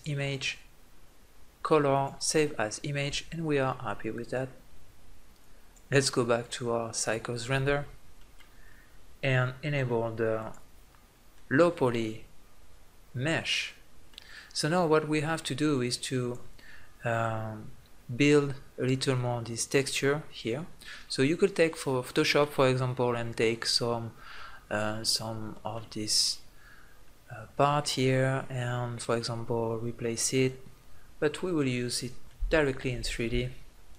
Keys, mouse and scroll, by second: 3.2 click, 3.6-5.2 middle drag, 5.2 click, 7.9 click, 11.1-13.0 middle drag, 15.2-18.2 drag, 18.2-23.9 middle drag, 24.4 middle click, 27.2-31.5 middle drag, 31.5-31.8 scroll up 1, 31.9 middle click, 33.1 middle click.